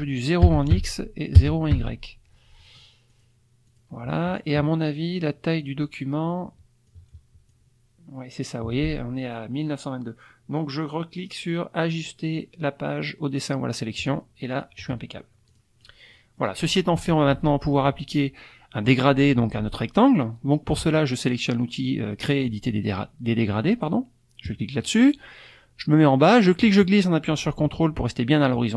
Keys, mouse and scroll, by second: 0.4 KP_0, 0.7 Tab, 1.7 Tab, 3.1 click, 3.7 click, 5.6 click, 6.9-7.7 drag, 14.0 click, 15.5 click, 15.8 click, 16.2 middle click, 16.4 click, 16.6 click, 24.5 click, 26.4-28.7 drag.